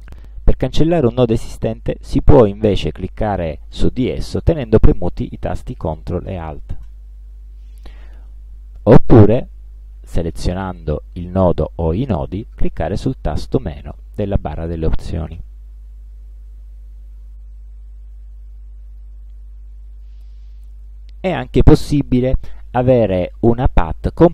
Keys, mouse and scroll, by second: 7.0 ctrl+alt+click, 8.9 click, 15.4 click, 18.6 click, 20.1 click.